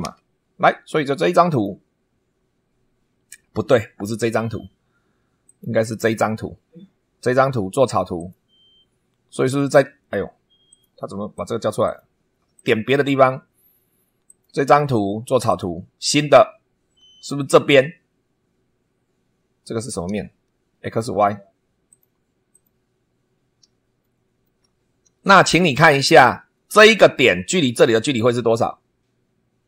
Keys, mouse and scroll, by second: 0.0 super+2, 1.4 click, 5.4 click, 8.1 click, 10.6 click, 11.3 click, 11.8 click, 12.5 click, 14.2 click, 15.4 click, 16.5 scroll up 1, 19.6-20.2 scroll down 4, 21.8 click, 22.5 click, 23.2 scroll up 1, 24.0 shift+middle click, 24.7 shift+scroll up 1, 25.2 shift+middle click, 25.9 shift+scroll up 2, 27.3 scroll down 2.